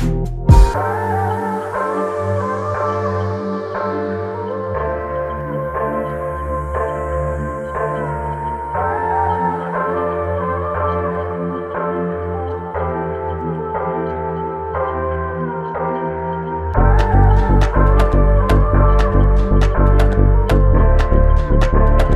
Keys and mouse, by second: 5.7 shift+click.